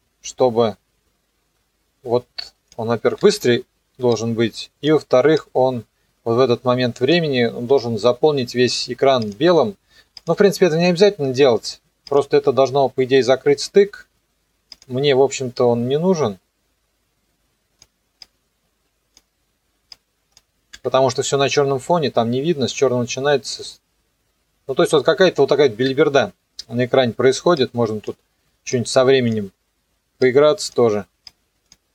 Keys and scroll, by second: 20.8 n, 21.4 KP_0, 25.7 KP_0.